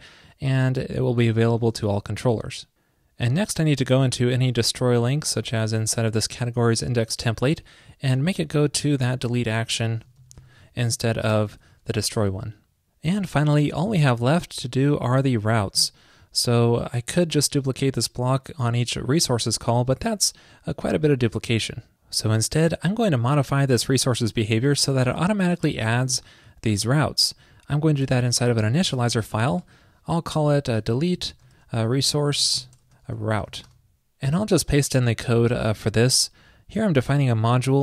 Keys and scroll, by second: 8.8 alt+shift+Right, 9.6 alt+Left, 12.3 super+s, 35.5 super+v.